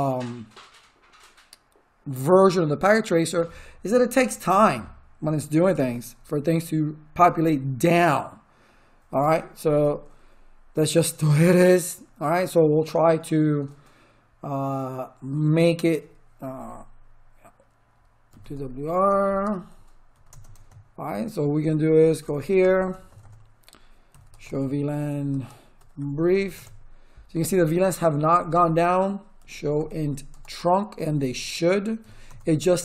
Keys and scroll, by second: 18.0-20.1 typing, 20.2 Return, 22.2 ctrl+z, 22.9 Return, 23.8-26.9 typing, 29.1-32.5 typing.